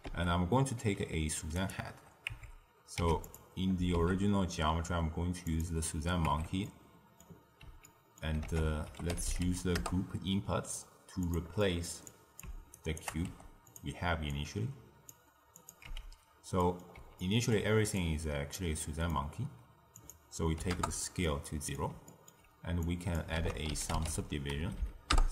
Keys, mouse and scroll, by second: 0.0 ctrl+a, 2.3 Tab, 2.9 x, 3.9 shift+a, 6.2 Tab, 6.6-8.4 middle drag, 8.4 ctrl+a, 11.5 middle click, 12.0 click, 12.7 shift+right click, 13.2 g, 14.2 drag, 15.5 click, 15.8 x, 16.5-17.9 middle drag, 17.9 click, 18.7 middle click, 19.2-19.9 scroll down 1, 19.9-21.2 drag, 21.2-22.8 middle drag, 22.8 click, 23.3 ctrl+a, 24.7 Down.